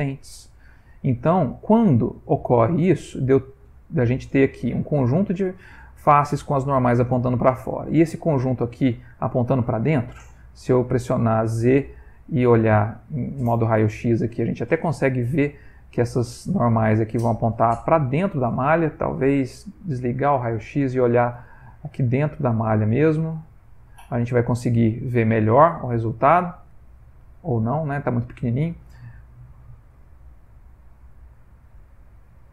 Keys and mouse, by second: 0.6 middle click, 1.3 middle click, 1.8 middle click, 2.5 middle click, 4.5 click, 5.6 ctrl+click, 7.4 click, 8.0 ctrl+click, 8.9 click, 9.6-10.3 middle click, 9.9 middle click, 12.0 z, 14.0-15.3 middle click, 14.5 middle click, 14.7 middle click, 15.6 ctrl+middle click, 16.5 middle click, 19.6 click, 20.2 middle click, 20.4 middle click, 20.8 shift+middle click, 21.0 shift+middle click, 21.5 ctrl+middle click, 23.3 middle click, 23.4 middle click, 24.1 ctrl+middle click, 24.3 ctrl+middle click, 24.6-25.7 ctrl+middle click, 26.3 ctrl+middle click, 27.0 middle click, 27.9 ctrl+middle click, 28.1 ctrl+middle click, 28.7 ctrl+middle click, 29.3 middle click, 30.0 ctrl+middle click, 30.1 middle click, 31.9-32.5 shift+middle click.